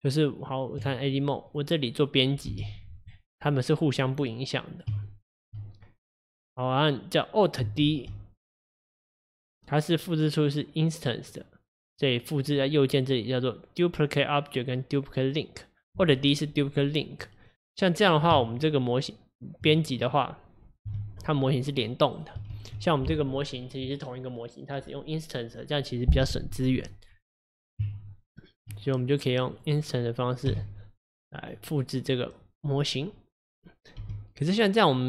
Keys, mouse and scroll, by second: 1.6 click, 2.6 g, 4.2 click, 5.0 Tab, 6.0 click, 7.9 alt+d, 11.4 click, 12.2 click, 12.5-15.5 right drag, 17.2 click, 17.5 click, 18.4 Tab, 20.1 click, 21.0 g, 22.6 ctrl+z, 26.6 click, 27.9 Tab, 29.2 click, 29.6 click, 30.6 x, 31.6 click, 34.1 g.